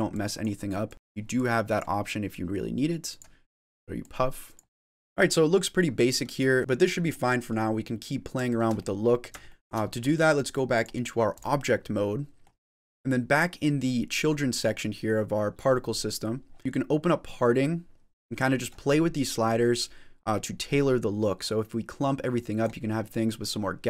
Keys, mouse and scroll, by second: 0.1 click, 0.9 click, 0.9 click, 0.9 middle click, 1.3 click, 2.9 click, 3.5 click, 4.0 click, 4.7 middle click, 4.7 middle click, 4.7 scroll up 1, 6.6 middle click, 7.1 middle click, 7.5 middle click, 8.3 shift+middle click, 8.6 middle click, 9.4 shift+middle click, 10.0-10.5 scroll up 2, 10.6 click, 11.9 middle click, 12.6 click, 14.2-15.6 scroll up 7, 16.0-16.6 scroll down 5, 16.6 click, 18.3 middle click, 19.7 click, 22.8 middle click.